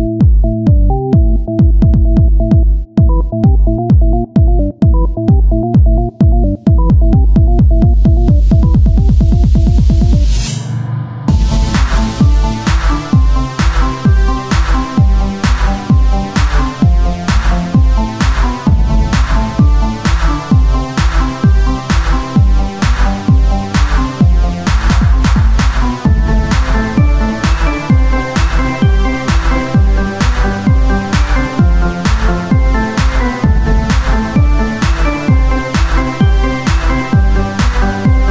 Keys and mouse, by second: 1.4 click, 1.9 Tab, 3.9 Tab, 3.9-5.5 drag, 6.1 Tab, 8.1 ctrl+z, 8.5 ctrl+z, 9.9 Tab, 11.2 Tab, 12.9-13.9 drag, 13.5 Tab, 17.7 Tab, 19.4 Tab, 19.4-23.0 drag, 23.0 KP_1, 23.4 Tab, 24.6-28.3 drag, 28.3 KP_1, 30.9 ctrl+z, 32.5 Tab, 35.0 Tab, 36.4 click, 36.9 KP_1, 37.7-38.3 drag.